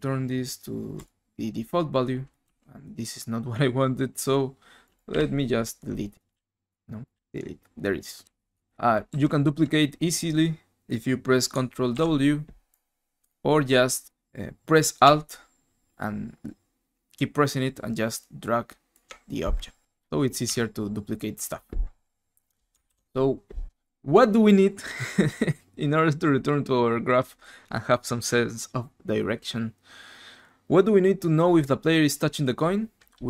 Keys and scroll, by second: 0.1-0.9 typing, 2.5 d, 5.1 Delete, 6.3 Delete, 7.1 Delete, 8.2 Delete, 8.5 d, 9.1 a, 12.0 ctrl+w, 22.8 ctrl+super+Left.